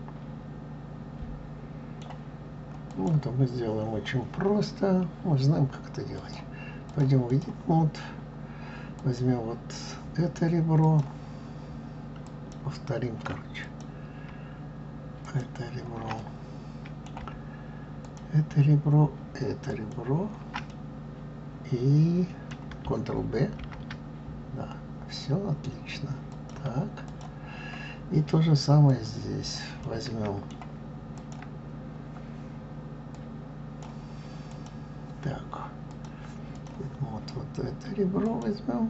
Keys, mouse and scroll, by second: 2.8 click, 6.1-7.4 drag, 9.0 click, 10.8 click, 12.3 click, 13.5 alt+click, 15.2 alt+shift+click, 16.2-18.0 middle drag, 18.0 alt+shift+click, 19.6 alt+shift+click, 20.7-23.6 middle drag, 23.6 ctrl+b, 27.1 click, 28.8 click, 29.8-31.2 middle drag, 31.2 click, 33.1-34.6 drag, 35.9-38.4 drag.